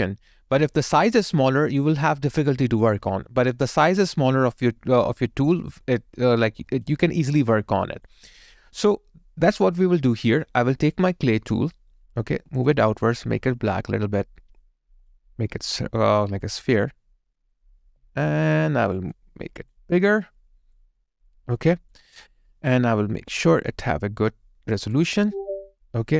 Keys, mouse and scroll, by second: 6.9 alt+click, 17.9 alt+middle click, 18.3 alt+right click, 21.6 alt+click, 22.2 alt+middle click.